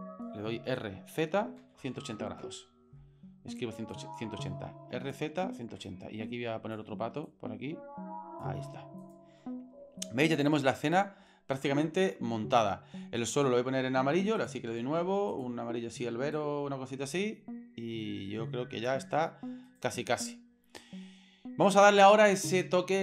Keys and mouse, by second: 3.9-5.1 drag, 5.9 click, 7.3-8.4 drag, 9.0 right click, 10.0-11.0 shift+middle drag, 13.2 right click, 14.4 click, 19.7 right click.